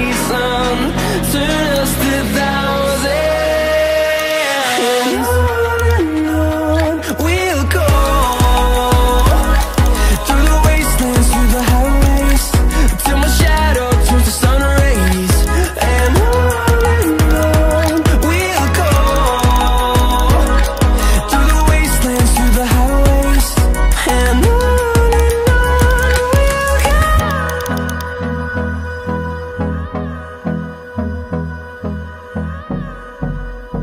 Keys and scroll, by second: 32.0 ctrl+d.